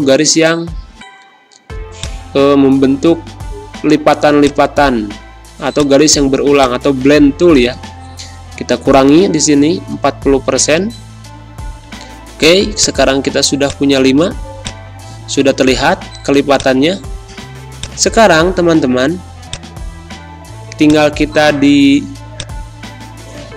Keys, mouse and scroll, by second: 1.9-8.9 drag, 8.9 4, 10.1 Return, 12.3 click, 13.1 z, 13.6 click, 14.1 space, 14.6 click, 14.7 space, 16.5-23.5 drag.